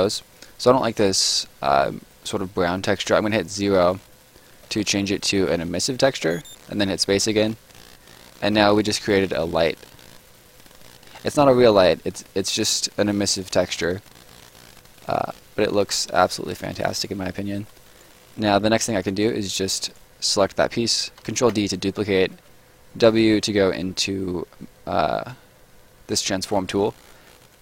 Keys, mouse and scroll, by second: 6.1 space, 7.1-7.7 scroll down 1, 7.7 right click, 12.1-12.4 scroll up 1, 12.4 right click, 15.2-15.5 scroll down 1, 15.5 right click, 17.2-17.6 scroll down 1, 17.6 scroll up 1, 17.7 right click, 19.0 click, 21.2 ctrl+click, 21.4 ctrl+d, 22.3 w, 27.5 click.